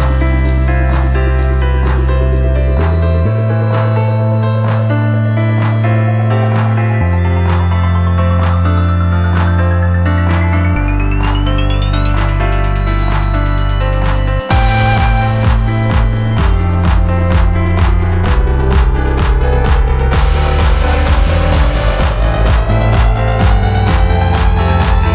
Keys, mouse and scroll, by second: 0.0-0.9 typing, 1.0 Return, 2.2 click, 3.9 shift+right click, 5.1 alt+click, 5.6 scroll up 2, 5.9 alt+click, 10.4 click, 12.2 click, 13.0-14.2 drag, 15.0 click, 15.4 click, 16.5-17.0 drag, 17.3-18.2 drag, 18.6 click, 21.2 click, 22.9 click.